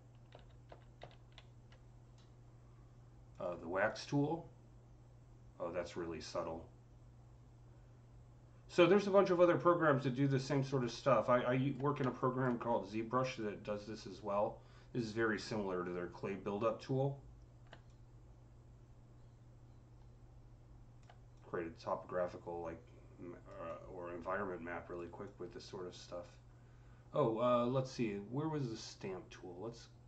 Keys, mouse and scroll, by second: 0.1 ctrl+z, 0.5 ctrl+z, 3.1 click, 3.7-10.9 drag, 10.9-12.5 alt+drag, 12.5 scroll up 5, 13.2-28.5 drag, 13.5 typing, 25.0 typing.